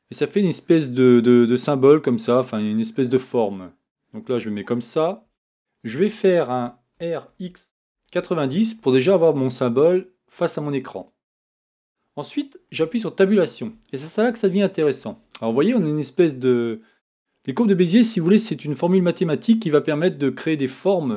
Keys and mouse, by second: 4.2 KP_1, 6.9 r, 12.8 Tab.